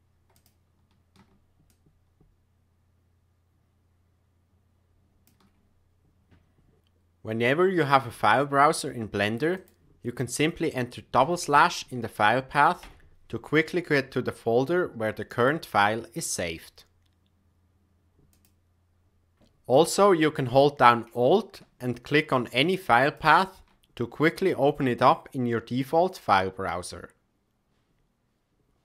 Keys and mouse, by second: 0.3 click, 1.6-4.1 shift+drag, 4.1-5.2 shift+middle drag, 7.8 click, 23.1 alt+click.